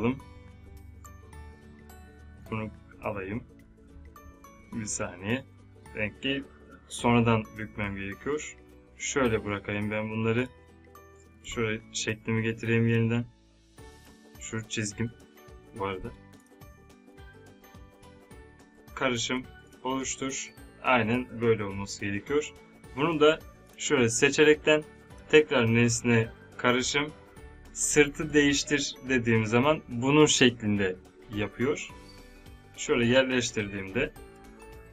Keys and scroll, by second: 11.4 v.